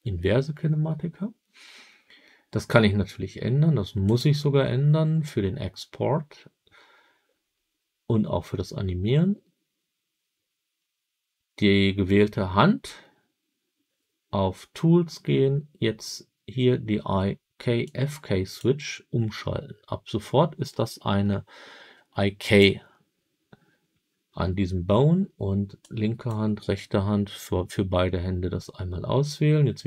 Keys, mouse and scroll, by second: 4.0 click, 17.7 click, 22.3 click, 25.7-26.2 drag.